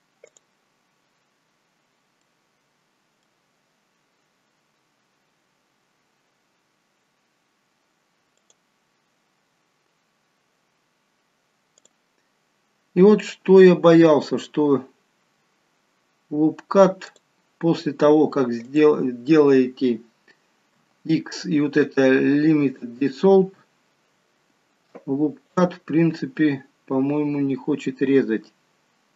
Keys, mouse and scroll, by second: 0.3 click, 1.5-1.9 scroll up 1, 2.2 middle click, 4.0-4.7 scroll down 3, 6.8 scroll up 3, 7.6 scroll up 1, 8.5 click, 9.2 scroll down 1, 11.8 click, 13.2 click, 17.1 click, 18.7 click, 20.8 x, 25.5 click.